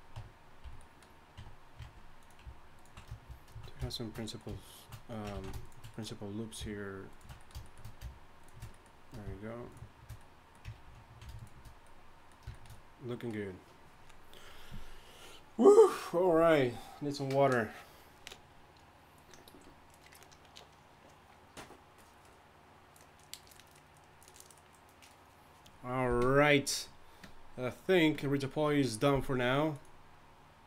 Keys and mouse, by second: 0.1 Tab, 0.6 a, 1.3 Tab, 5.3 ctrl+z, 10.8 ctrl+z.